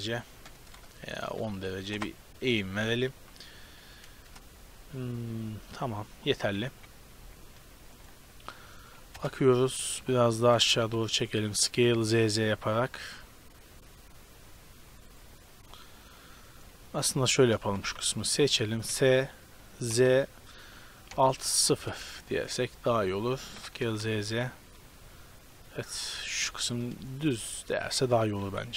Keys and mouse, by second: 2.7 z, 3.2 KP_7, 4.1 KP_0, 7.2 z, 9.1 KP_0, 9.6 z, 10.5 s, 16.5-18.5 middle drag, 17.1 Tab, 17.7 z, 17.9 a, 18.1 b, 18.9 s, 22.1 z, 23.1 Tab, 23.5 s, 26.7-27.3 drag, 28.4 KP_7.